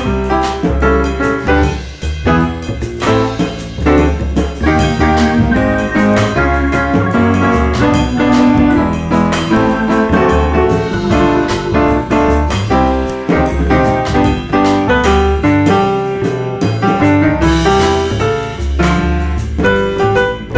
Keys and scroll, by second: 3.5 2, 3.7 F4, 8.5 F3, 9.6 F3, 13.8 F3, 14.9 F3, 18.4 1, 19.5 1, 19.7 F4.